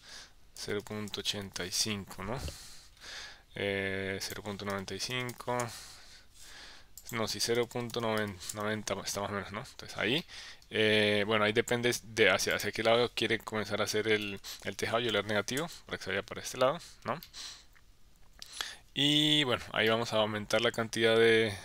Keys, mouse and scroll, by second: 4.3-6.8 drag, 7.0-9.1 drag, 10.2 middle click, 12.5-16.4 drag, 14.4 Left, 17.2-18.6 middle drag, 19.9 middle click.